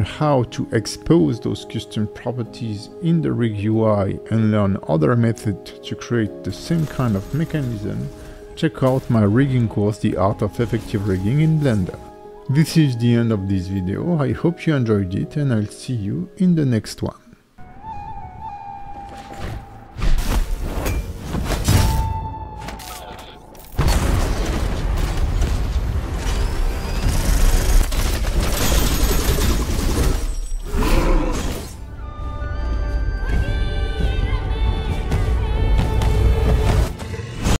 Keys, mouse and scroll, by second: 0.5 scroll up 2, 1.7 middle click.